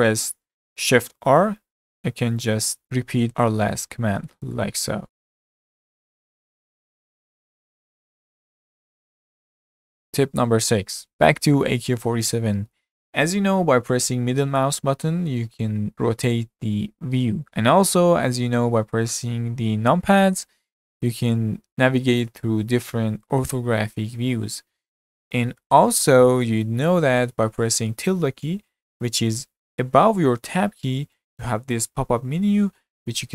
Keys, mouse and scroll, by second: 0.0-1.5 middle drag, 1.5-6.2 typing, 7.3-10.0 middle drag, 12.3-15.3 middle drag, 20.2 KP_1, 20.9 KP_3, 21.7 KP_7, 22.3 KP_9, 23.6 KP_1, 24.2 KP_3.